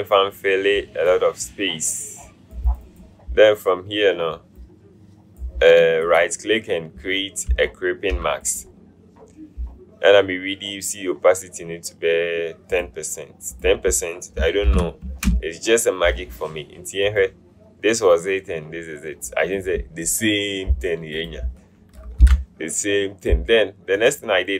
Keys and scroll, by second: 8.1 typing, 14.9 BackSpace, 15.2 Return, 22.3 ctrl+0.